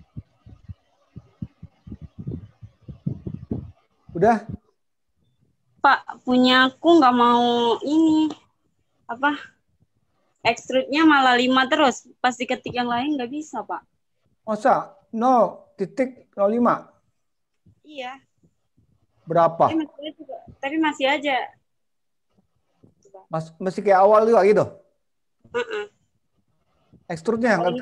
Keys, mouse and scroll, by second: 1.5 middle click, 2.5-3.0 scroll down 3, 3.6 middle click, 6.8-7.3 scroll up 5, 8.0 scroll down 2, 12.3 middle click, 27.2 middle click.